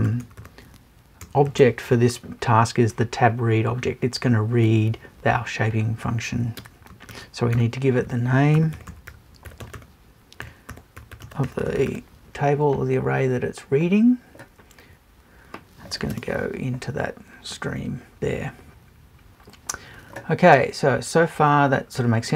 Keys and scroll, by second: 16.1 BackSpace.